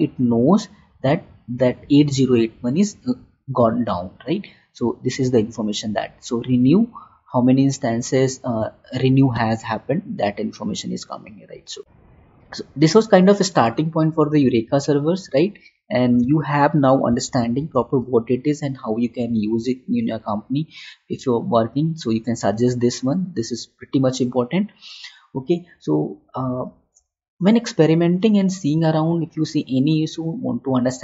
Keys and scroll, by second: 16.6 alt+Tab.